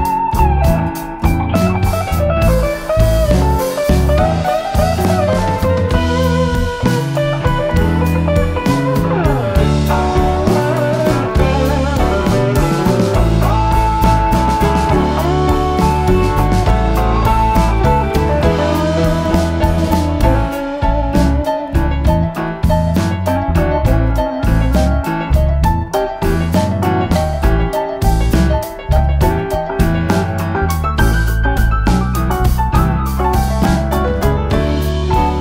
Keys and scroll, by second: 3.0-3.7 typing, 6.9-7.4 typing, 8.6 -, 8.9 space, 10.0 typing, 13.5 ctrl+z, 13.8 Home, 15.1 shift+F6, 21.9 F1, 22.4 typing, 26.3 F1, 27.6 ctrl+d, 28.9 ctrl+*, 30.6 ctrl+z, 33.0 shift+F6, 35.0 F1.